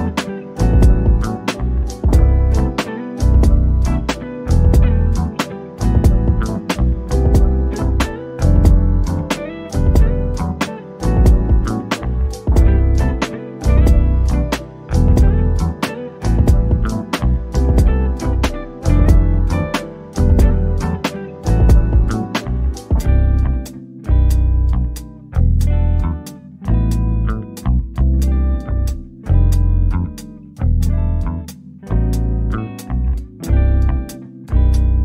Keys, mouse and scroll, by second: 3.6 scroll up 1, 4.5 click, 7.9 click, 9.2 scroll down 1, 11.6 alt+click, 17.7-20.2 drag, 20.2 click, 22.0 right click, 23.7 click, 26.1 right click, 26.9 click, 29.2-29.6 scroll down 1, 29.8 scroll up 1, 30.4-30.9 scroll up 1, 30.9 shift+click, 31.3 right click, 33.5 click.